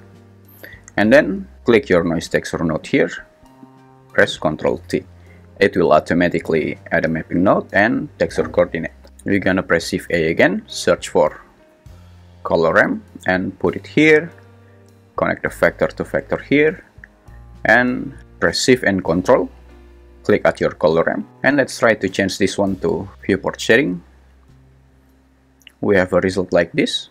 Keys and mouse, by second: 1.7 g, 4.8 ctrl+t, 10.1 shift+a, 15.4 click, 15.7-17.0 drag.